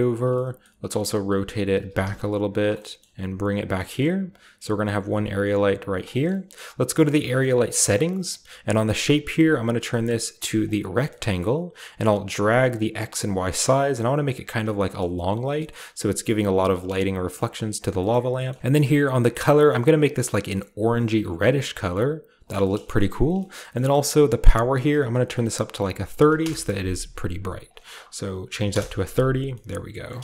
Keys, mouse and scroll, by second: 0.1 click, 0.3 middle click, 0.6-2.5 scroll down 1, 0.9-2.0 typing, 2.6 click, 3.1 typing, 3.5 click, 4.1-5.7 typing, 4.3 click, 4.8 click, 5.9 click, 6.2-7.1 scroll up 1, 7.1 click, 7.6-8.9 scroll down 1, 8.9-9.5 shift+scroll down 1, 8.9 shift+click, 10.6 click, 11.0 shift+middle click, 11.2-13.3 shift+scroll up 1, 12.2-13.3 shift+drag, 13.6 shift+click, 14.6-15.0 typing, 14.7-16.2 scroll down 1, 14.8-16.2 middle drag, 15.3 click, 16.2-17.2 scroll up 1, 17.2 scroll up 1, 17.3-18.6 scroll down 1, 17.3 middle click, 17.6-18.6 typing, 17.7 click, 17.9-19.4 middle drag, 18.6-19.3 shift+scroll up 1, 19.3 shift+click, 19.3-20.0 shift+scroll up 1, 20.0-22.4 drag, 22.6-24.7 shift+middle drag, 22.8-24.6 shift+scroll up 1, 24.6-26.1 drag, 26.1-26.9 typing, 27.6 click, 28.1-28.9 typing, 30.1 shift+middle click.